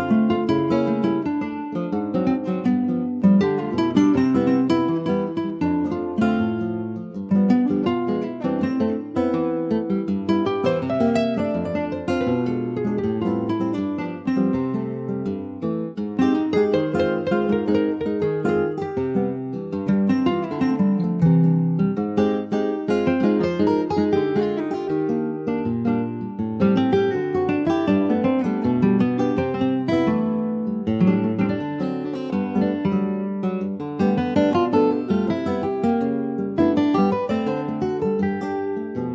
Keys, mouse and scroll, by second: 0.0 click, 0.7 shift+middle click, 0.9-1.5 shift+scroll up 2, 1.7-4.7 drag, 4.7 Tab, 5.2 alt+z, 5.4 middle click, 6.3 ctrl+s, 6.3 ctrl+click, 6.7 middle click, 7.2 Tab, 7.5 middle click, 8.0 ctrl+s, 8.2 Tab, 8.7 click, 9.0 click, 9.8 click, 11.1 ctrl+s, 11.7 /, 13.2-14.7 middle drag, 14.7 ctrl+s, 14.9 middle click, 15.7 click, 17.5-18.6 middle drag, 18.6 click, 19.9 ctrl+z, 20.1 click, 22.6-24.4 middle drag, 24.4 s, 28.1 click, 29.7 s, 32.4 click, 33.4 click, 33.7-34.0 scroll down 2, 34.0 middle click, 34.4 click, 34.8 middle click, 35.3 ctrl+s, 35.4 click, 35.7-36.4 scroll down 2, 36.4 alt+middle click, 37.0 alt+z, 37.3-37.9 alt+scroll up 3, 37.9 shift+d, 38.9 click.